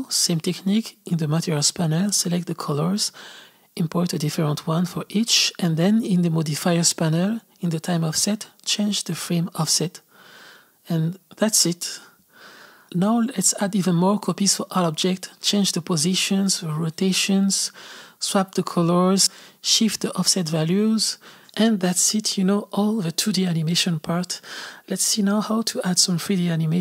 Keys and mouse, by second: 0.5-2.1 drag, 2.8 click, 4.1 click, 5.5 click, 7.2-10.4 drag, 10.4 space, 10.9 click, 12.6 shift+d, 14.5 r, 14.8 g, 15.7 g, 15.9 r, 16.7 click, 17.4 click, 17.9 click, 18.2 space, 18.4 space, 18.9 click, 19.5 shift+d, 20.2 r, 20.5 click, 21.5 click, 21.6 click, 21.8 g, 22.0 g, 23.0 click, 23.5 space.